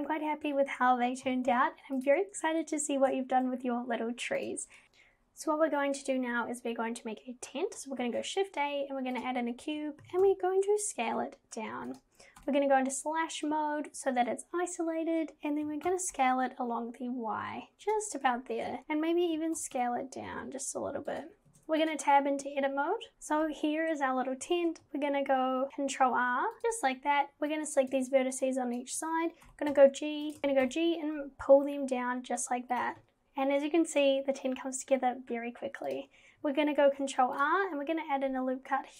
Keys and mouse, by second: 1.3 g, 4.4 click, 4.8 click, 8.0 shift+a, 10.0 g, 12.4 /, 15.6 g, 19.2 g, 21.5 Tab, 23.1 ctrl+z, 26.1 ctrl+r, 27.7 click, 28.6 shift+click, 29.5 g, 30.4 ctrl+z, 35.9 click, 36.8 ctrl+r.